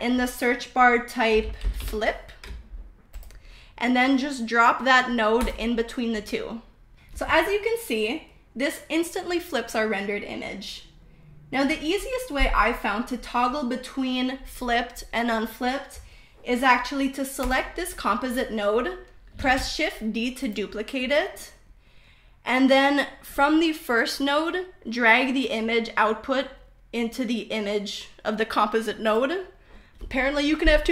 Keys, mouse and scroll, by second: 8.3-10.0 shift+middle drag, 10.3 shift+middle click, 13.1 click, 14.1 middle click, 14.9 middle click, 16.9 click, 19.3 shift+d, 24.1-27.0 drag, 29.2 middle click, 30.8 middle click.